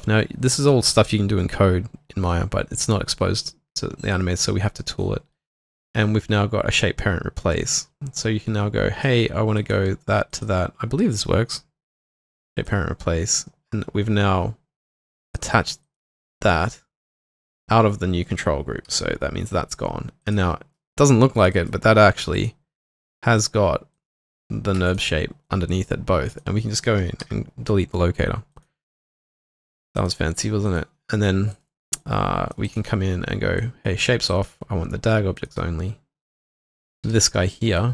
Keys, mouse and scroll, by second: 10.3 shift+click, 15.8 double click, 18.9 double click, 21.5 right click, 23.9 double click, 24.9 shift+click, 27.2 Delete, 29.0 double click, 30.0 right click, 36.8 double click, 37.0 typing.